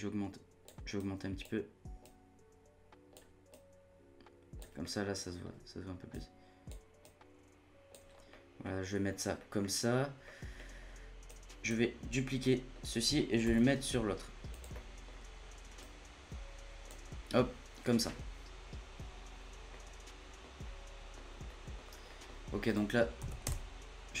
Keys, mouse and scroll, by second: 4.8-6.1 middle drag, 6.1 click, 8.1 scroll down 1, 8.2 scroll up 1, 8.3-8.7 middle drag, 8.7-9.1 scroll down 1, 9.1 scroll up 1, 9.4-10.8 middle drag, 10.8-11.2 scroll down 4, 11.2-12.1 drag, 12.1 scroll down 2, 12.2 scroll up 1, 12.4-13.4 middle drag, 13.4 shift+d, 14.6 scroll down 1, 14.7 middle click, 15.1-15.8 scroll up 1, 15.8-18.4 drag, 18.6-20.6 middle drag, 20.6-21.4 scroll up 1, 21.4 middle click, 21.8-22.1 scroll up 1, 22.1 middle click, 22.6-24.2 drag.